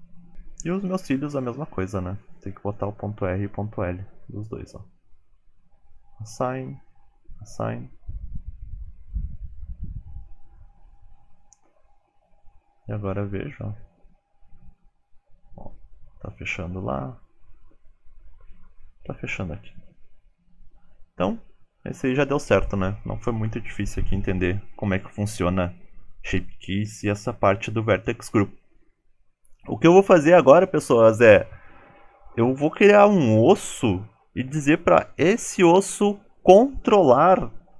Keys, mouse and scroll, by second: 0.1 click, 1.1 Tab, 2.5 click, 2.7 Tab, 3.1 click, 3.8 alt+z, 4.0 click, 4.8 click, 5.5 alt+z, 5.7 click, 6.6 click, 11.9 Tab, 12.4 click, 23.6 shift+middle click, 24.1-24.5 scroll down 4, 24.3 shift+middle click, 24.9 KP_1.